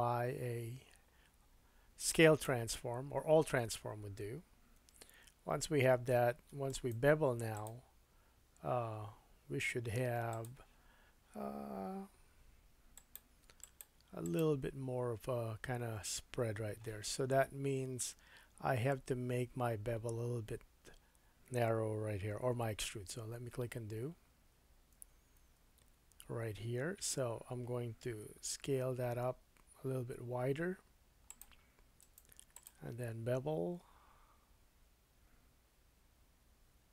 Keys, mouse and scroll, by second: 4.8 Tab, 6.7-7.8 right drag, 10.4-12.9 drag, 13.7 click, 14.3 click, 22.9 super+z, 23.3 super+z, 24.5 super+z, 25.0 super+z, 25.4 super+z, 28.1 s, 31.4-36.9 drag, 32.0 right click.